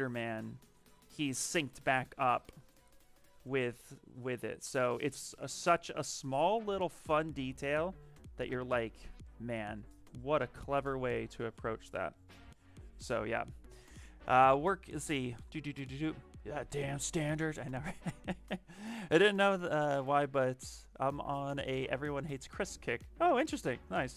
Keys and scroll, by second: 2.2 shift+d.